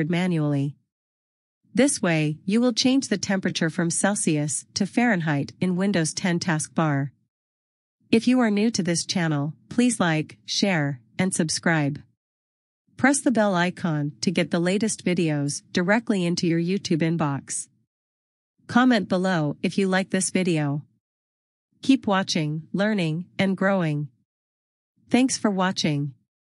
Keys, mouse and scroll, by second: 6.8 click, 10.4 click, 20.8 click.